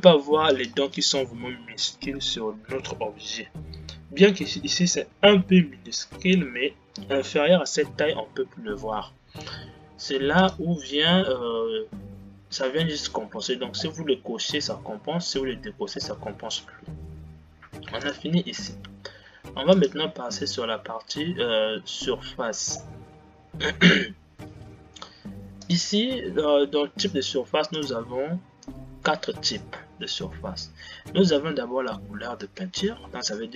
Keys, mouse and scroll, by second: 1.1 space, 10.7-13.5 drag, 14.7-15.9 scroll down 8, 15.9 scroll down 3, 18.4-23.5 drag, 23.5-24.0 scroll down 6, 26.1-31.2 drag.